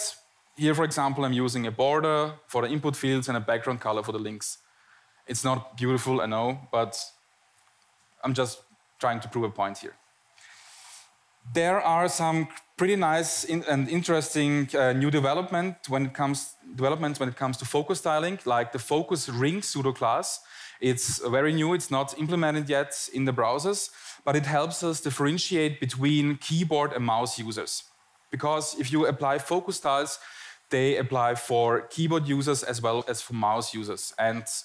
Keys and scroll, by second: 0.8 Tab, 1.6 Tab, 2.3 Tab, 3.5 Tab, 4.3 Tab, 5.3 Tab, 8.7 Tab, 9.4 Tab, 10.1 Tab, 10.5 Tab.